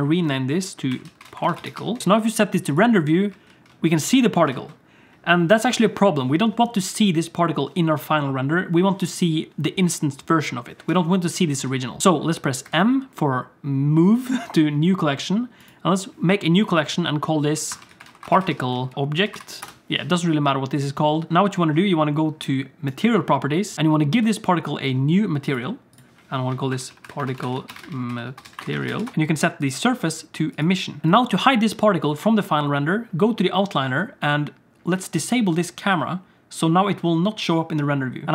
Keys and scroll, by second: 3.5 alt+shift+z, 4.5 alt+shift+z, 12.6 m.